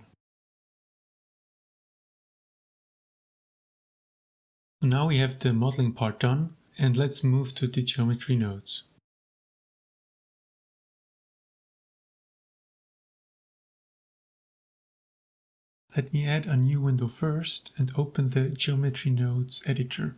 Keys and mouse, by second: 2.6 click, 3.0-3.4 middle drag, 3.4 click, 3.9 click, 4.5-5.2 middle drag, 6.0 middle click, 6.2 shift+click, 6.8-7.2 shift+drag, 9.1 a, 16.2-18.4 drag, 18.9-20.1 drag.